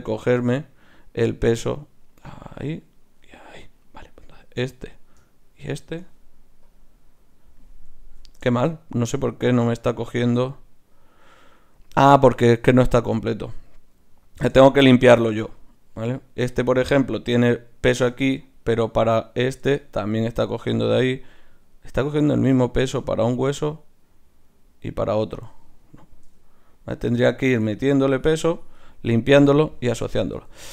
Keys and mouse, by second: 6.7 click, 8.2 ctrl+z, 16.1-18.0 right drag, 18.0-20.3 middle drag, 18.6-20.3 drag, 18.6-26.2 right drag, 26.2 middle click, 27.1-29.4 drag, 29.4 middle click, 30.3 ctrl+z, 30.6 ctrl+z.